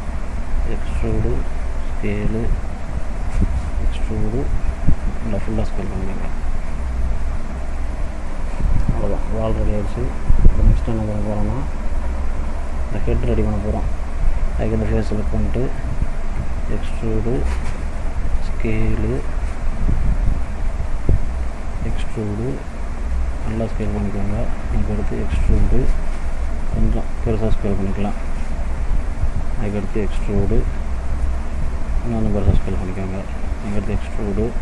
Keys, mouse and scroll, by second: 0.0 e, 1.5 s, 3.4 e, 5.3 s, 8.0 scroll down 2, 8.3 middle click, 9.2-9.6 scroll up 1, 9.9 middle click, 11.0 middle click, 13.0 shift+middle click, 13.5 middle click, 14.7 click, 15.3 middle click, 16.4 e, 17.8 s, 21.4 e, 23.0 s, 24.8 e, 26.8 s, 30.0 e, 31.9 s, 33.5 e.